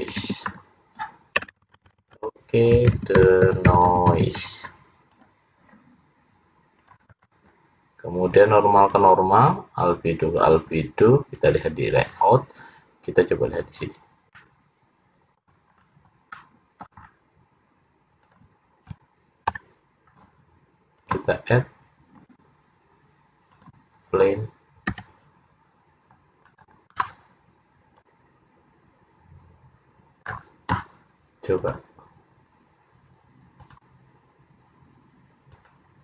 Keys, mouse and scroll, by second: 11.7 click, 13.2 click, 14.5 middle click, 15.8-16.2 scroll up 5, 16.5 middle click, 17.2-18.3 scroll down 5, 18.7 click, 20.3 Delete, 21.1 click, 23.9 click, 25.1 s, 28.2 click, 31.8 click, 34.0 click, 35.7 click.